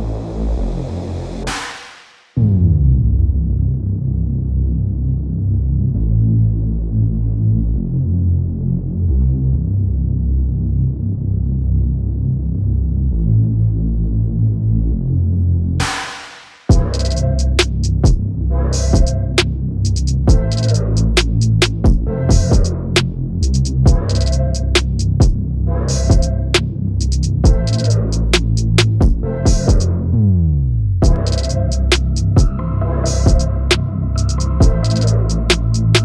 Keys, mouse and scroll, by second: 0.7-2.1 typing, 3.8-11.2 drag, 11.8 click, 15.0 ctrl+shift+click, 23.1 shift+click, 23.5 shift+click, 24.1 shift+click, 24.8-26.5 drag, 28.5 KP_2, 28.8 KP_0, 28.9 KP_1, 29.2 KP_8, 30.5 click, 31.3 KP_2, 31.5 KP_0, 31.7 KP_1, 31.9 KP_9, 33.2 click, 34.1 KP_2, 34.3 KP_0, 34.5 KP_2, 34.6 KP_0, 35.5 click.